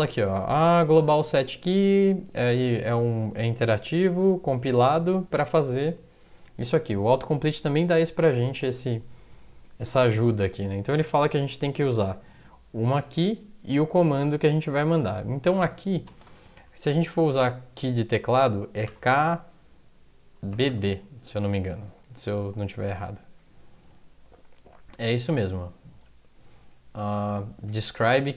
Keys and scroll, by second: 16.1-16.5 typing, 17.2 Left, 18.6-21.2 typing.